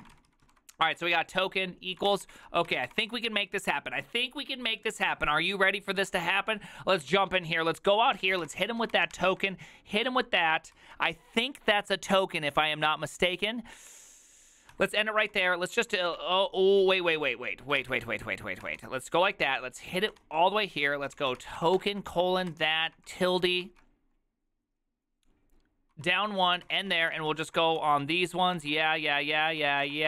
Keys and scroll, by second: 0.0-0.5 typing, 0.5 ctrl+u, 2.6-3.6 typing, 8.5-9.4 typing, 10.8 ctrl+c, 15.5-17.2 typing, 17.9 ctrl+c, 18.5-19.2 typing, 20.3-23.3 typing, 23.7 ctrl+c, 25.8-30.0 typing.